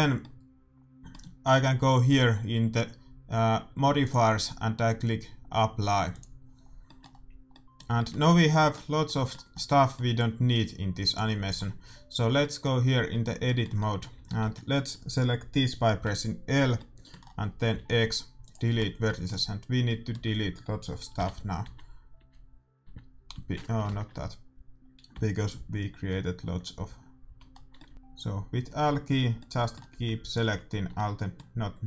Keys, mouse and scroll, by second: 4.0-5.8 drag, 6.0-7.8 drag, 6.6-9.0 middle drag, 8.2 a, 11.0-12.8 right drag, 12.7 click, 12.7 middle click, 13.0 Tab, 14.2 a, 14.4 a, 16.0 l, 17.8 x, 21.2 l, 21.6 l, 22.2 l, 22.9 l, 23.9 ctrl+z, 25.1-30.7 typing, 27.6-29.7 middle drag.